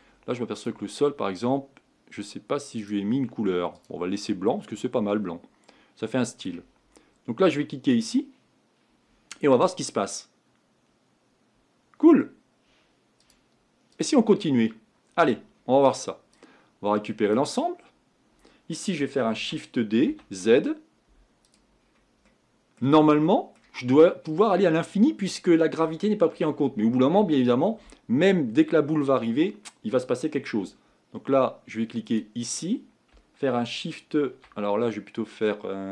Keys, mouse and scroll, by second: 0.7 click, 3.9-5.7 drag, 5.7-8.0 middle drag, 8.0-14.4 drag, 14.4-15.5 middle drag, 15.5-17.4 scroll up 4, 17.4 click, 19.4 shift+d, 21.8-22.3 scroll up 1, 22.3-23.8 middle drag, 23.8-24.4 scroll up 3, 24.4-32.1 middle drag, 32.1 click.